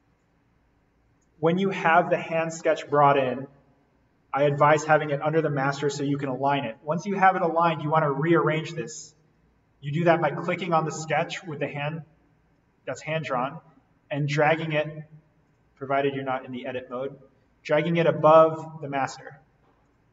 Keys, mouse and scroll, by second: 6.7-19.1 drag, 19.1 right click, 19.8 click.